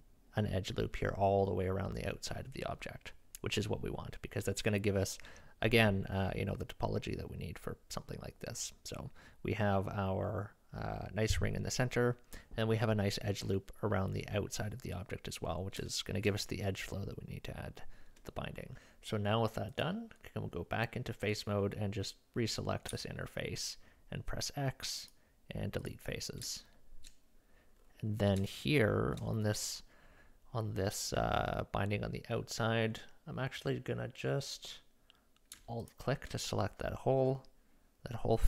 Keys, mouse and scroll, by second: 15.9 shift+middle click, 22.9 x, 26.1 middle click, 26.6 shift+middle click, 27.8 middle click, 28.1 middle click, 28.4 shift+middle click, 29.1-30.9 middle drag, 35.8 alt+click, 36.0-38.4 alt+middle drag.